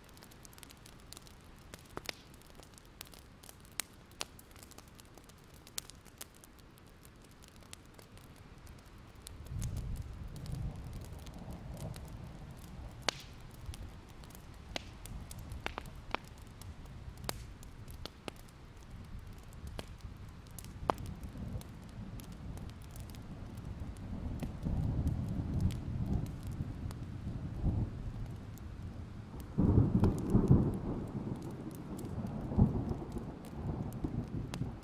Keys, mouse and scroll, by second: 4.2-4.5 alt+scroll down 1, 4.6 alt+scroll up 1, 4.8 right click, 5.9 click, 6.5-8.0 alt+scroll up 1, 8.0-13.7 drag, 14.3 ctrl+z, 22.4-24.3 alt+scroll down 2, 24.3-26.2 scroll up 2, 27.1 click, 27.6-29.3 alt+scroll up 2, 29.3 click, 31.9 Escape, 33.1 click, 33.8 Escape.